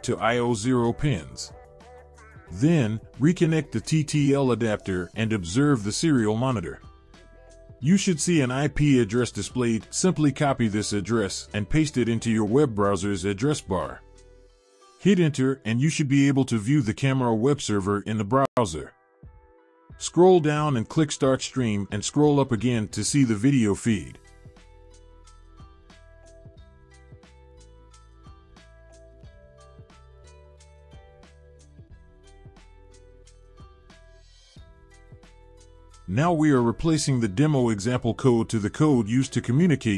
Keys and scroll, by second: 15.1 ctrl+v, 15.9 Return.